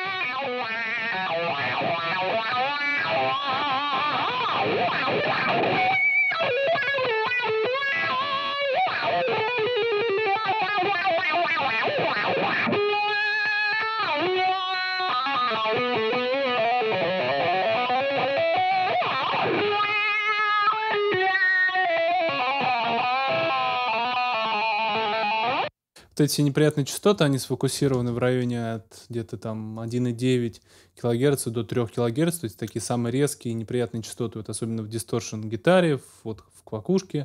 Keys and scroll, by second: 25.4 space, 28.0 super+s.